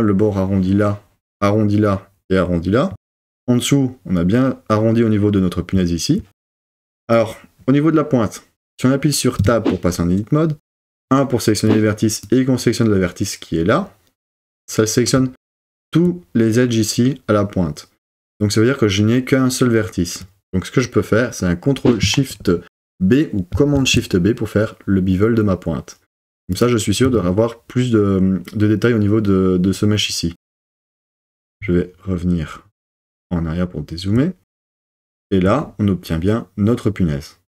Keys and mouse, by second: 9.4 Tab, 10.9 1, 11.8 click, 23.5 shift+super+b, 26.6 click, 27.0 Tab.